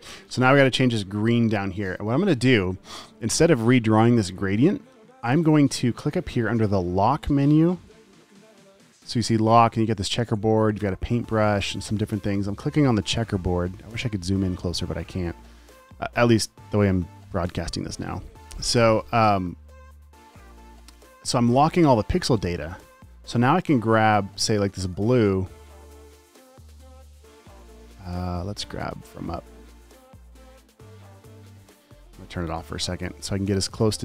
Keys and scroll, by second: 0.0-0.9 typing, 23.4 i.